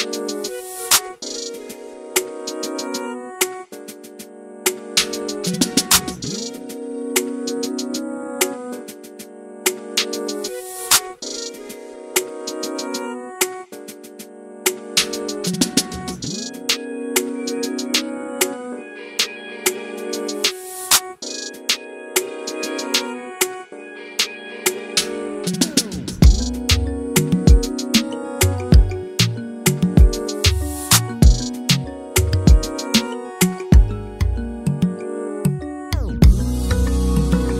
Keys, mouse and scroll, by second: 0.8 click, 1.4 f, 1.7 click, 2.9 click, 3.4 middle click, 4.0 scroll up 1, 4.3-5.8 shift+right drag, 5.8 click, 6.2 f, 6.4-7.5 drag, 7.5 right click, 8.4-9.9 drag, 9.9 right click, 10.4-12.5 middle drag, 16.8 scroll down 2, 16.9 scroll up 2, 18.4 click, 18.8 alt+a, 19.1 z, 19.4 middle click, 20.1 scroll down 2, 20.2 middle click, 20.5 scroll up 2, 20.7 click, 22.7-26.9 drag, 26.9 scroll up 2, 27.0 middle click, 27.5 ctrl+shift+click, 28.0 shift+middle click, 28.1-28.6 scroll up 1, 28.6-30.6 drag, 30.6 scroll down 2, 30.7 middle click, 31.1 scroll up 1, 31.2-31.6 middle drag, 31.6 scroll down 1, 31.8 middle drag, 32.0 scroll up 1, 32.1 shift+middle click, 32.6-34.9 drag, 35.0-35.4 scroll down 1, 35.4-37.5 drag.